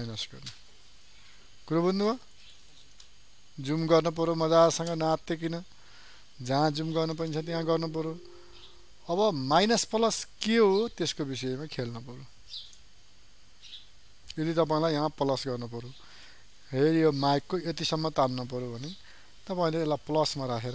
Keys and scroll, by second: 1.9 ctrl+space.